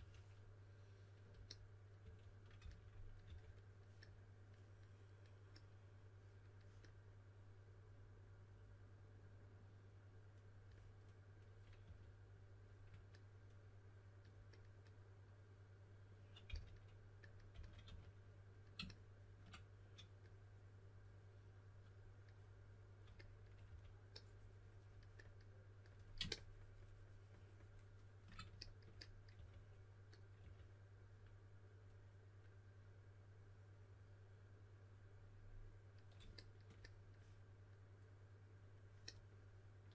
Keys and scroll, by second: 0.0-0.4 typing, 2.0-3.2 typing, 11.8 typing, 16.4-18.3 typing, 23.6 3, 29.3 4, 30.3 typing.